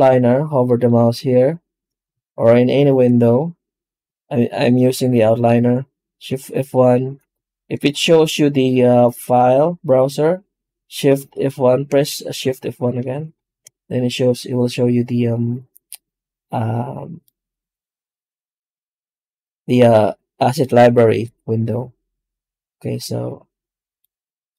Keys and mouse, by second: 0.0-2.6 drag.